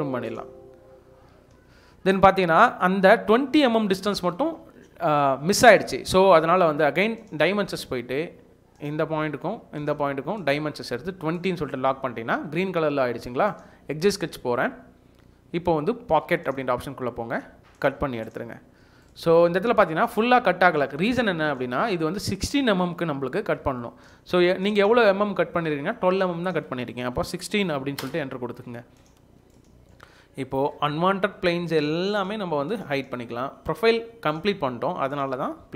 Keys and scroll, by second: 1.3 Escape, 4.2 Escape, 4.4 Escape, 23.6 Escape, 27.2-28.1 typing.